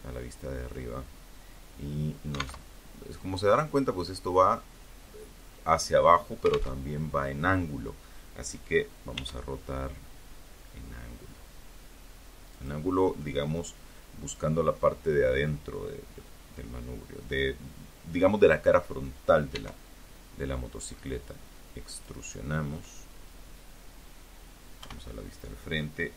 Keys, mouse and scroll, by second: 0.7 alt+Tab, 4.9 alt+Tab, 7.3 r, 10.7 click, 11.3-12.7 middle drag, 17.7 e, 20.1 click, 22.9 KP_1, 24.7 r.